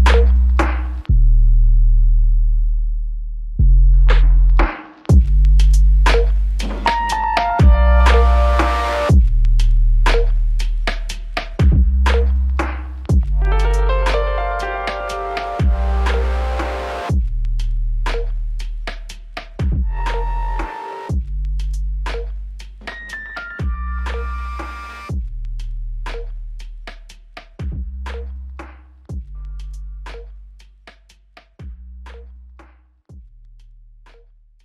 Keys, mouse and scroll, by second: 1.6 ctrl+click, 7.0 ctrl+click, 12.8 f, 14.2 alt+click, 15.4 ctrl+click, 22.7 ctrl+click, 26.5 double click, 28.0 alt+click, 32.8 double click.